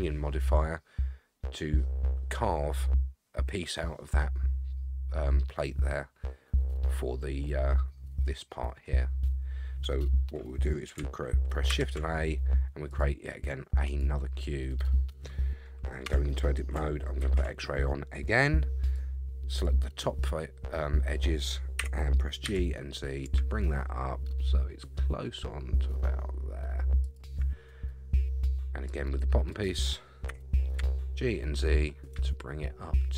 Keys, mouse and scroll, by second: 0.2-0.6 scroll up 2, 11.7 shift+a, 16.0 Tab, 17.2 alt+z, 18.9 click, 21.8 g, 28.3 scroll down 1, 28.9 click, 30.3 g.